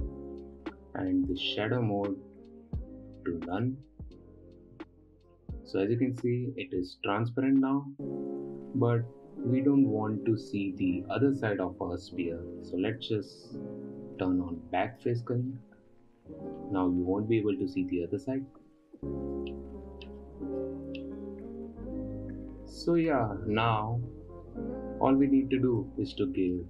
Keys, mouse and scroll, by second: 2.0-5.0 drag, 5.8-8.8 middle drag, 15.4 click, 17.0-20.1 middle drag, 20.1-20.7 scroll down 2, 20.7-21.4 scroll up 1, 21.4 middle click, 21.5-22.0 scroll up 2, 22.0-23.1 scroll down 1, 23.1 scroll down 1, 23.1-24.1 middle drag, 24.1 scroll up 3, 26.3-26.6 middle drag.